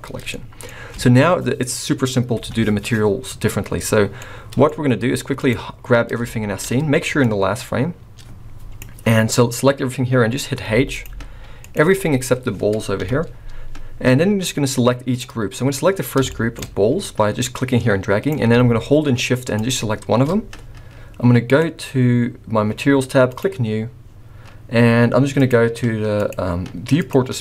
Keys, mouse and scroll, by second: 0.3 middle click, 2.4 KP_1, 3.6-4.0 scroll down 1, 4.1 middle click, 4.9-5.4 scroll down 2, 5.4 click, 6.2 shift+middle click, 7.2 click, 10.7 h, 10.9 click, 11.1 h, 11.6 click, 11.9 h, 13.0 KP_1, 13.5-14.0 scroll up 2, 14.0 click, 14.0-14.5 scroll up 1, 16.3 shift+middle click, 16.6-17.1 scroll up 3, 17.4 click, 19.6 shift+click, 21.4 click, 23.3 click, 25.3 click, 26.2 click, 27.0 click.